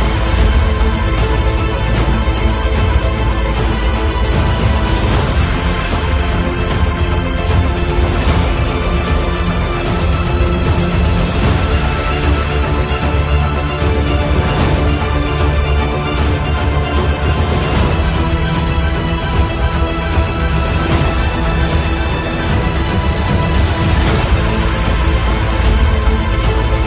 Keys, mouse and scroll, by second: 1.0 alt+Caps_Lock, 2.6 alt+click, 5.8-11.6 alt+drag, 13.4-14.1 typing, 14.1 click, 17.1 click, 17.1 click, 22.8 click, 26.5 click.